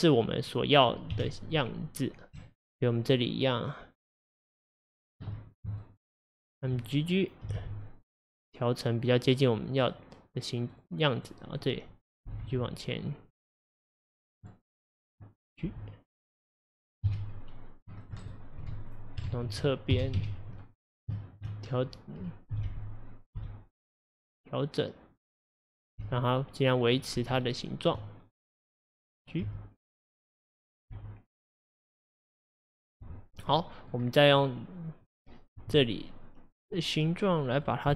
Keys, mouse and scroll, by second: 0.4 click, 1.2 1, 1.6 click, 2.6 ctrl+click, 3.1 ctrl+click, 3.6 ctrl+click, 4.2 ctrl+click, 4.8 ctrl+click, 5.8 shift+click, 6.5 shift+click, 7.5 g, 10.8 click, 11.3-12.3 drag, 12.3 g, 14.5-15.7 middle drag, 15.7 g, 18.3 right click, 18.9 click, 19.3 ctrl+z, 20.0 KP_1, 20.2 KP_3, 21.2 shift+middle click, 21.5-22.6 shift+scroll up 2, 22.6 g, 25.9 click, 26.1 g, 27.5-28.8 shift+middle drag, 28.8 click, 29.5 g, 30.8 click, 31.0 g, 33.3 scroll down 1, 33.6 middle click, 34.1-34.4 scroll down 1, 34.4-36.6 middle drag, 36.6 click, 37.6 click.